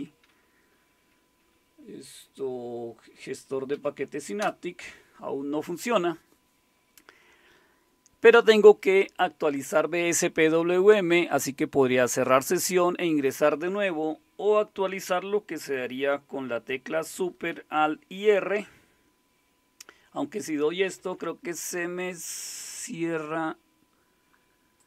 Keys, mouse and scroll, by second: 3.7 Down, 4.4 Return, 24.8 click.